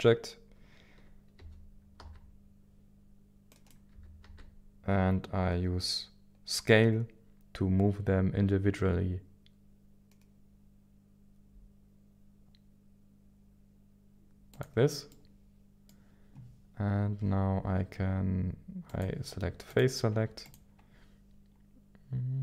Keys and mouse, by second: 1.4 g, 1.9 y, 3.5 right click, 3.9 s, 4.2 y, 14.5 click, 15.1 middle click, 18.9 click.